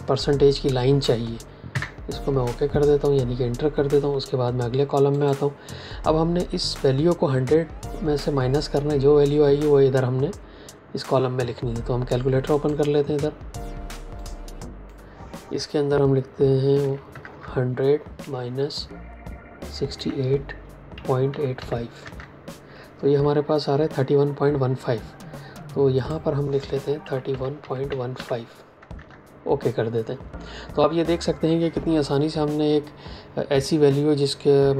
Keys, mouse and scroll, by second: 1.6 KP_Enter, 5.0 click, 12.4 click, 16.7 KP_1, 17.0 KP_0, 18.1 KP_Subtract, 19.5-21.9 typing, 21.9 KP_Enter, 25.9 click, 26.9-28.1 typing, 28.9 KP_Enter.